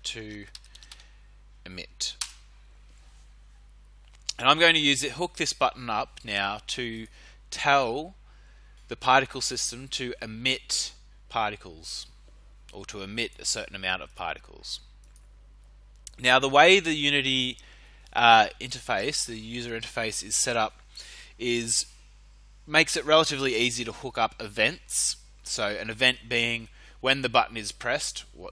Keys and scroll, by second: 0.0-1.4 typing, 2.1 Return.